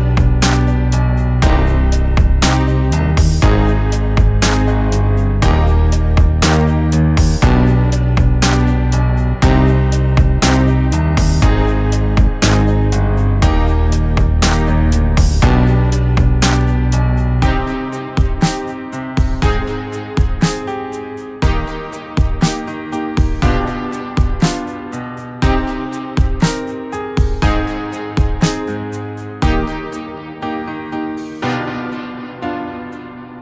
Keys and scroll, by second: 4.1-7.0 typing, 5.2 ctrl+z, 10.2 Delete, 10.3 ctrl+z, 12.0 ctrl+z, 17.9 ctrl+z, 19.4 ctrl+z, 23.6 ctrl+z, 28.5 ctrl+z.